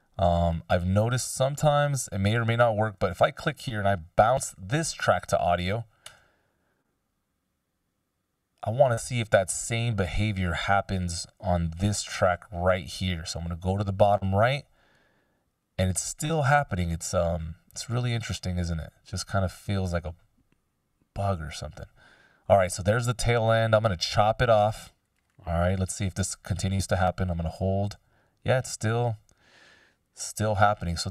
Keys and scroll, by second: 5.0 ctrl+b, 6.2 Return, 10.4 BackSpace, 11.8 s, 12.3 Delete, 26.1 BackSpace.